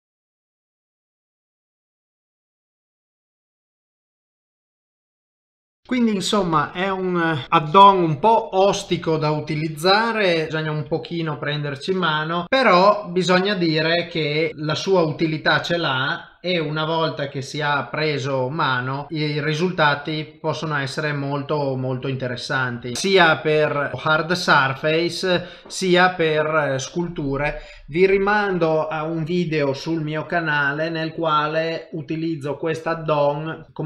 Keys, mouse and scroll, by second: 0.2 click, 0.2 shift+click, 0.2 shift+click, 0.5 click, 0.7 middle click, 1.0 click, 1.1 middle click, 2.1-3.7 typing, 2.5 middle click, 2.9 click, 5.6 middle click, 8.6 middle click, 9.1 shift+middle click, 9.6 ctrl+middle click, 10.2 middle click, 10.7 click, 11.0 shift+middle click, 11.4 middle click, 12.4 click, 12.4 shift+v, 14.5 middle click, 14.5 shift+v, 15.0 g, 17.6 ctrl+shift+v, 22.0 click, 22.8 click, 22.9 ctrl+shift+v, 22.9 middle click, 23.9 middle click, 23.9 shift+middle click, 23.9 shift+middle click, 25.4 shift+middle click, 26.7 middle click.